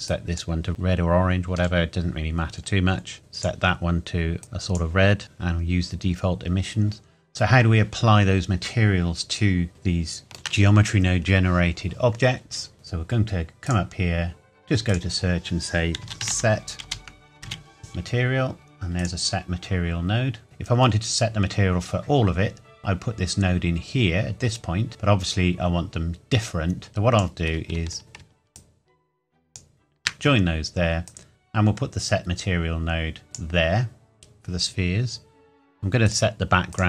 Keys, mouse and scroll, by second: 1.6-2.6 scroll down 1, 3.2 click, 9.5-10.2 scroll up 1, 10.2 shift+middle click, 12.8 scroll up 1, 13.6 click, 16.0-17.9 typing, 19.0 click, 20.5 middle click, 24.5-24.9 scroll up 1, 24.9-26.7 scroll down 1, 26.9 click, 28.0 ctrl+z, 28.6 shift+right click, 31.0 click, 36.0 click.